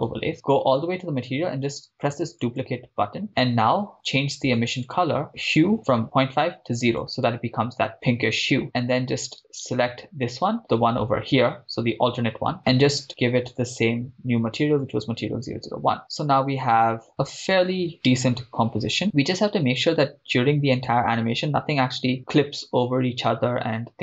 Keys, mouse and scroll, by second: 0.3-1.3 scroll up 7, 1.3-2.4 scroll up 1, 2.4 click, 3.3 click, 3.3 scroll down 2, 4.9 click, 8.6 click, 9.6 right click, 10.6 click, 10.6 scroll up 10, 12.6 drag, 13.5-15.2 drag, 16.0-16.6 scroll down 4, 16.6 scroll down 1, 16.7-17.1 scroll up 2, 17.1 shift+middle click, 22.2-23.4 drag.